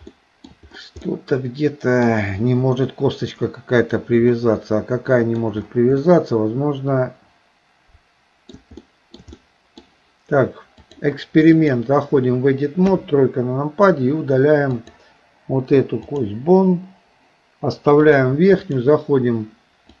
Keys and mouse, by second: 0.2 shift+middle click, 1.1-2.1 middle drag, 4.4-5.5 middle drag, 6.0-8.6 middle drag, 8.8 shift+middle click, 9.4 middle click, 10.9 click, 13.0 KP_3, 14.9 click, 15.5 Delete, 18.0 click.